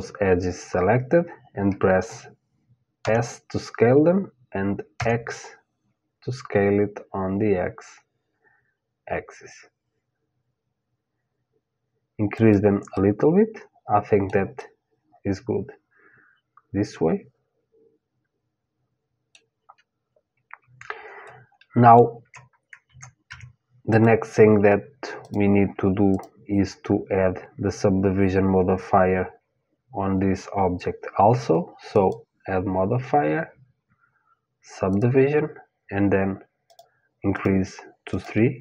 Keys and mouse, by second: 2.6 s, 12.6-16.2 middle drag, 20.9-22.9 middle drag, 22.9 Tab, 23.5-27.7 drag, 31.5-34.6 drag, 36.3-38.6 drag.